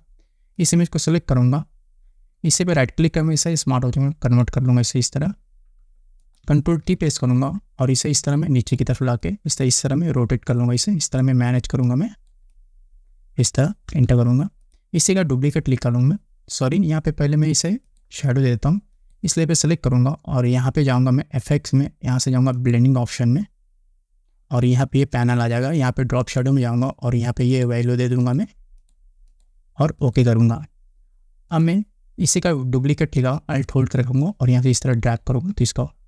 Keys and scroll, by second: 6.8 ctrl+t, 13.9 Return.